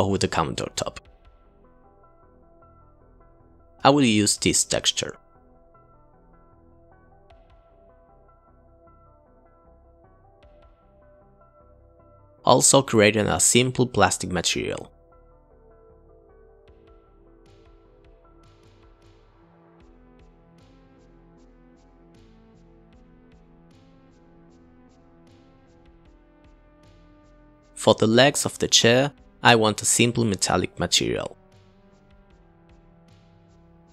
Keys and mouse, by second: 0.2 drag, 0.6 click, 1.0 click, 1.2 middle click, 1.7 click, 2.5 click, 6.3 click, 6.5 click, 7.6 click, 7.9 click, 8.6 click, 8.8 shift+a, 9.1 click, 9.5 click, 16.1 click, 16.3 click, 16.4 BackSpace, 16.6 click, 17.5 ctrl+a, 18.6 click, 19.2 click, 19.3 click, 19.5 click, 19.8 click, 20.3 Delete, 20.5 click, 20.8 shift+a, 21.3 Delete, 21.3 shift+a, 21.5 click, 22.0 click, 23.1 click, 23.4 click, 23.6 click, 24.4 click, 28.4 click, 28.7 click, 29.2 click, 29.3 click, 29.6 click.